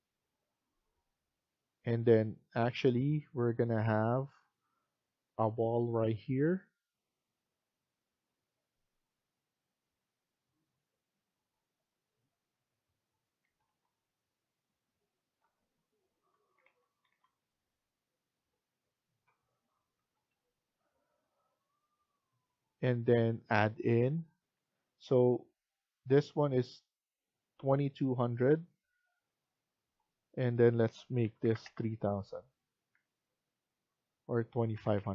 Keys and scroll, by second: 13.3 Escape, 13.5 Escape, 16.3 Down, 16.5 Down, 16.9 Down, 19.9 Escape, 20.2 Escape, 24.4 Escape, 30.8-33.2 typing, 34.4-35.1 typing.